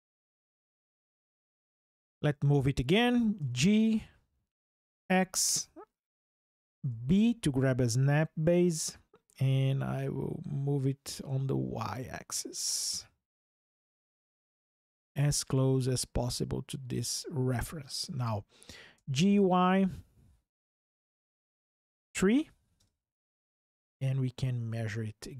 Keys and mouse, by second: 0.0 click, 0.6 Delete, 3.2 g, 4.7 x, 6.6 b, 8.3 click, 11.0 y, 16.7 click, 18.7 g, 19.0 y, 21.8 KP_3, 22.6 KP_Enter.